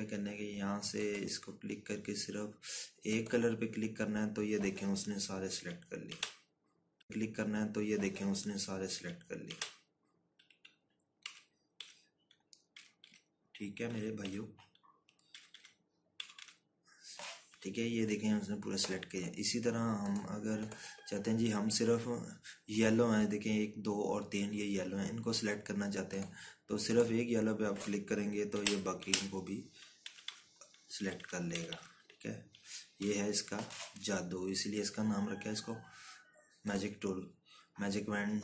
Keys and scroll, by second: 9.8 Right, 10.3 Right, 12.1 Left, 12.6 Left, 13.6 Right, 13.9 Right, 14.7 Left, 15.1 2, 17.0 Left, 17.2 Left, 29.4 Right, 29.9 Right, 30.9 Left, 31.1 Left, 31.8 Right, 32.0 Right, 32.4 Left, 32.6 Left, 33.4 Right, 33.8 Left.